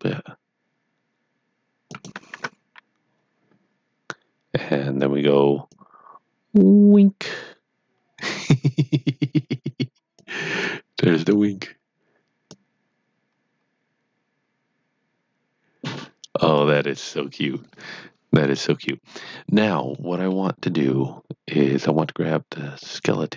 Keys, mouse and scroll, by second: 1.9 click, 2.4 Tab, 3.0 scroll down 1, 5.2 scroll down 1, 5.7 click, 12.5 click, 19.8 click, 20.0 middle click, 22.7 click.